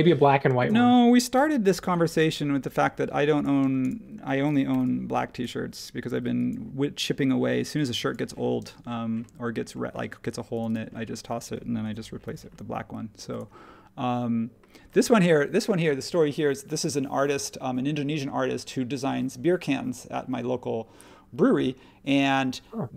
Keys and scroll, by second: 0.5 space, 1.3 m, 3.6 space, 4.7 p, 6.1 e, 8.6 space, 11.8 super+1.